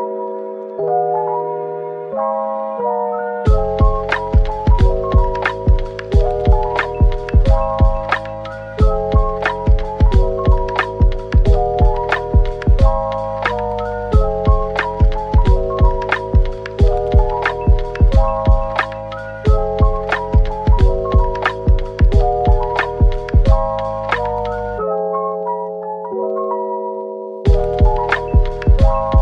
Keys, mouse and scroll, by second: 1.1 typing, 4.7 typing, 6.3 scroll up 1, 6.9-7.6 typing, 8.1-8.8 scroll up 1, 8.8 typing, 10.3-11.4 typing, 12.3 right click, 12.9-13.2 typing, 13.6 right click, 14.5 ctrl+z, 14.7 ctrl+z, 14.8 ctrl+z, 15.8-17.3 typing, 18.4-20.0 typing, 20.6-20.9 scroll down 1, 20.9 middle click, 21.6 typing, 23.9 right click, 24.7-25.2 typing, 26.8-27.1 typing, 28.3 typing.